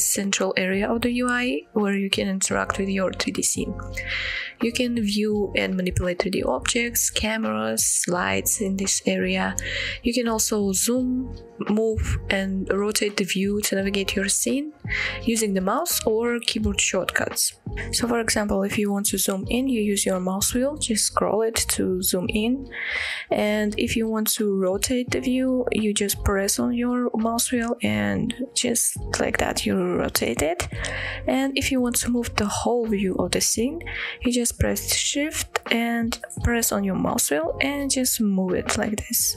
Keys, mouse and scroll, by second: 4.3-7.2 middle drag, 8.3-9.7 scroll up 4, 9.7-13.3 scroll down 3, 13.3-15.2 middle drag, 15.7 middle drag, 16.1 scroll down 2, 16.5-16.9 middle drag, 17.1-17.5 middle drag, 17.6-18.0 scroll up 2, 18.0-18.5 middle drag, 19.1-20.4 scroll up 5, 20.4-21.2 scroll down 4, 21.5-22.7 scroll up 4, 22.7-24.0 scroll down 4, 24.0-24.9 scroll up 3, 25.4-29.3 middle drag, 29.5-31.3 middle drag, 36.2-36.8 shift+middle drag, 36.9-37.2 shift+middle drag, 37.5-37.9 shift+middle drag, 38.0-38.3 shift+middle drag, 38.6-38.9 shift+middle drag.